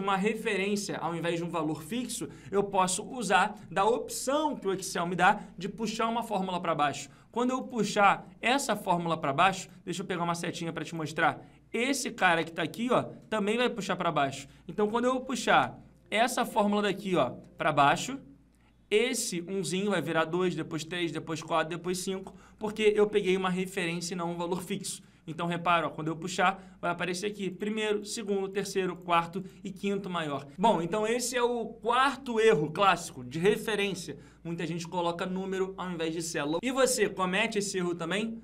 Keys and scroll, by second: 15.8 ctrl+v, 16.8 ctrl+c, 17.0 ctrl+v, 23.6 F2.